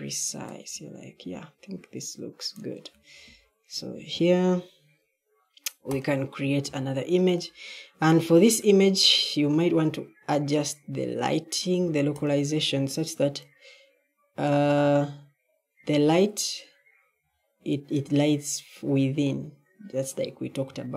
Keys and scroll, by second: 1.8 typing.